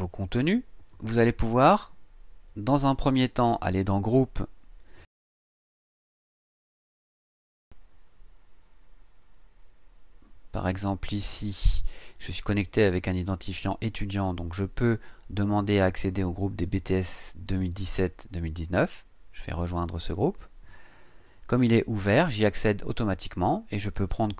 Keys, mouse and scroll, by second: 3.7 click, 5.6 click, 11.4 scroll down 1, 20.0 click.